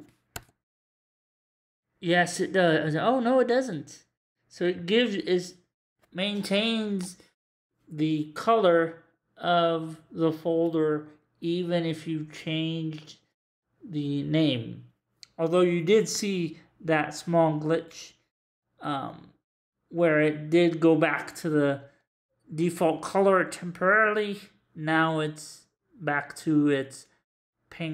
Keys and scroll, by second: 0.3 2, 1.1 Return.